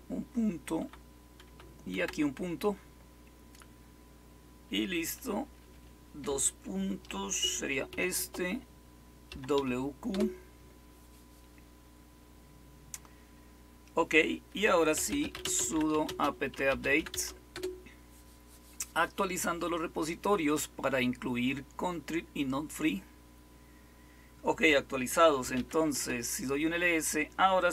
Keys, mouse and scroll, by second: 0.0-0.7 typing, 1.4 Right, 1.8 ., 5.3 Escape, 5.5 typing, 5.7 Escape, 7.8 typing, 9.0-10.0 typing, 10.0 Return, 14.6-17.5 typing, 25.1-26.0 typing.